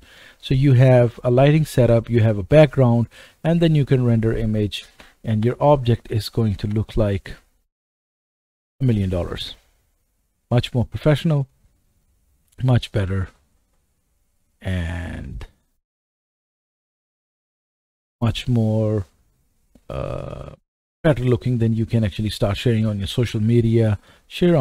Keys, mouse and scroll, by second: 0.2 middle click, 3.3-9.3 right drag, 5.4 KP_0, 6.6 KP_0, 12.0-13.1 drag, 13.1-15.3 right drag, 15.3-24.6 drag.